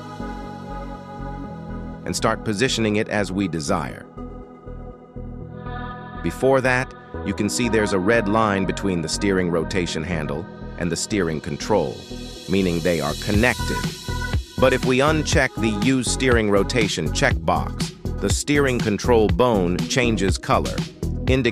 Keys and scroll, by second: 2.8 g, 5.2 g.